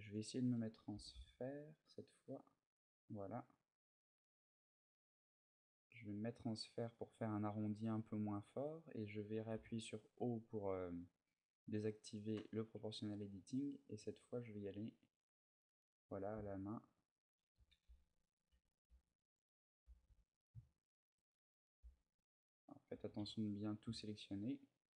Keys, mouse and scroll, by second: 6.7 click, 10.8 click, 15.5 click, 15.8 right click, 16.4 shift+right click, 17.3-19.6 typing, 18.1 right click, 21.0 right click, 21.6 b, 22.7 g.